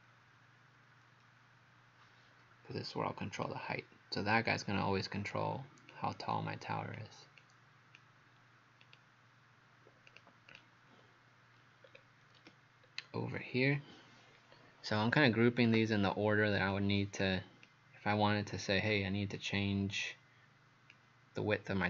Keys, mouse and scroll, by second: 3.4 click, 8.8 right click, 10.1 click, 10.6 click, 11.9 scroll down 2, 12.9 scroll up 1, 16.7 click.